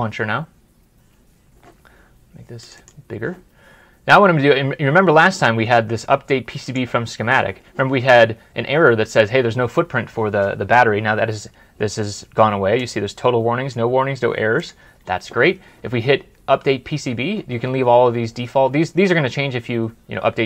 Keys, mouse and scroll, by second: 2.6 double click.